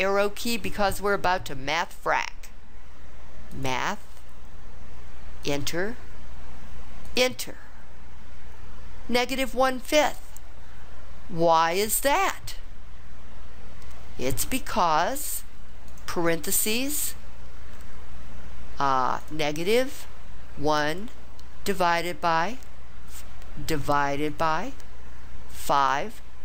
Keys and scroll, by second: 5.4 Return, 7.1 Return, 15.9 (, 20.8 1, 24.3 /, 25.8 5.